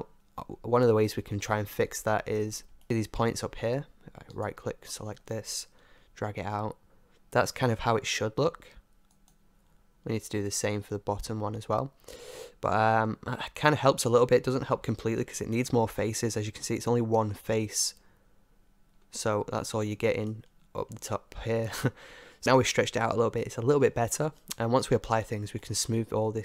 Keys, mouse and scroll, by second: 0.9 Tab, 1.9 middle click, 4.6-6.3 right drag, 6.1 g, 9.6-13.2 middle drag, 12.9 g, 16.0-18.2 middle drag, 20.7 Tab, 21.2 middle click, 21.4 middle click, 23.4-26.4 middle drag.